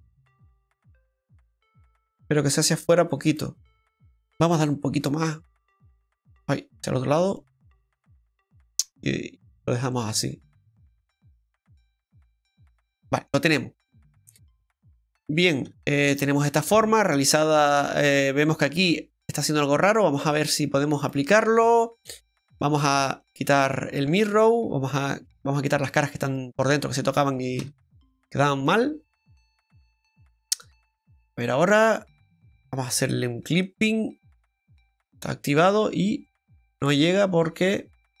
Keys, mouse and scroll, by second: 3.3 click, 4.2 middle click, 4.2-4.5 scroll down 1, 5.8 click, 8.5 click, 8.5-9.4 scroll down 4, 8.9 middle click, 13.5-14.4 scroll up 2, 13.9 middle click, 14.4 shift+middle click, 15.7 Tab, 16.1-16.4 scroll down 2, 16.4 middle click, 19.2 middle click, 21.0 middle click, 21.0 click, 22.1 middle click, 23.2 click, 23.6 middle click, 24.0 Tab, 24.2 scroll up 2, 25.1 scroll up 1, 25.2 right click, 25.6 click, 26.3 right click, 26.8 shift+right click, 27.5 x, 28.9 scroll down 2, 29.2 middle click, 30.6 click, 31.2 middle click, 33.6 click, 35.4-35.9 scroll up 1, 35.9 Tab, 36.3 middle click.